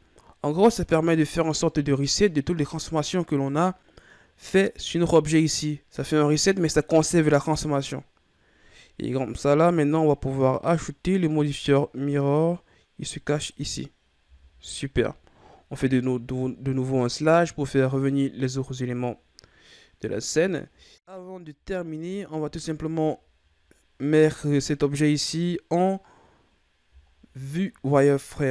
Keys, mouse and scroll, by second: 1.1-2.4 shift+scroll up 1, 2.4-5.5 ctrl+scroll down 3, 10.5-13.5 drag, 15.7 KP_Divide, 17.4 KP_1, 19.0-19.6 scroll down 4, 19.6-20.2 scroll down 3, 20.2-20.5 ctrl+scroll down 3, 21.1 KP_3, 21.7-22.5 ctrl+scroll down 4, 22.5-23.9 ctrl+scroll up 7, 23.9 right click, 26.6-27.0 scroll down 1, 27.0-28.5 shift+scroll up 4.